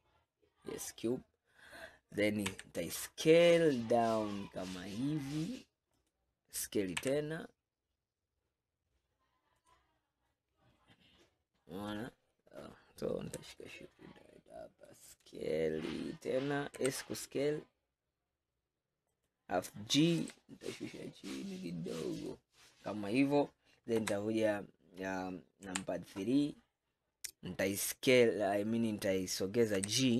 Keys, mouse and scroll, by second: 2.5 s, 7.1 s, 11.3-11.9 scroll up 4, 13.7-16.7 shift+middle drag, 16.8 s, 20.3 g, 24.0 KP_1, 25.7 KP_3, 29.8 g.